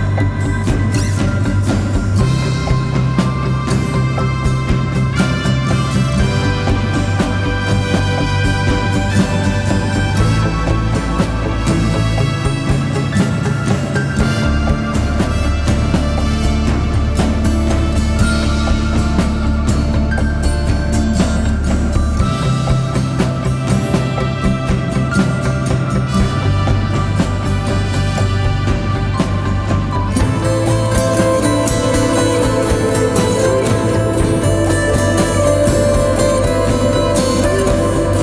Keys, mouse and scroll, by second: 3.6 Return, 13.3 shift+click, 14.9 shift+click, 15.8 shift+click, 23.0 right click.